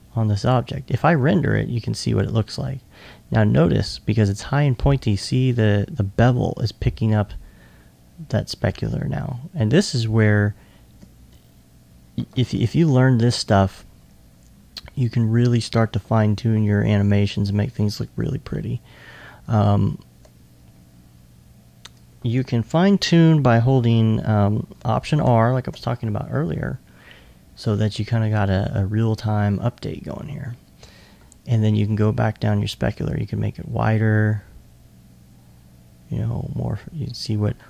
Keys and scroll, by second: 25.3 alt+r.